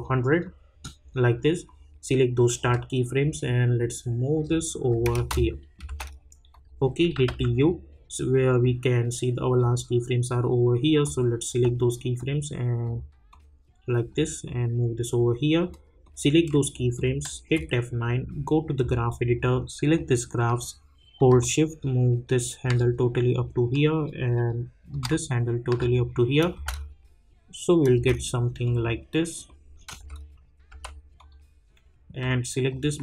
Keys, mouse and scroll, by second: 5.1 space, 9.7-17.3 drag, 17.3 F9, 18.8-24.9 drag, 24.9-26.4 drag, 26.5 space, 28.6 click, 30.0 space, 31.1-33.0 drag.